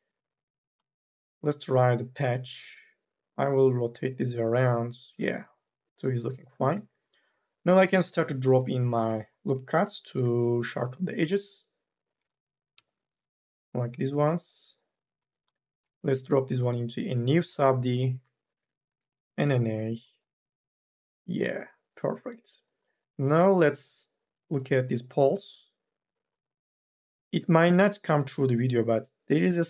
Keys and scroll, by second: 6.7 2, 8.2 l, 8.6 ;, 9.9 k, 10.3 l, 17.9 Delete, 18.8 n.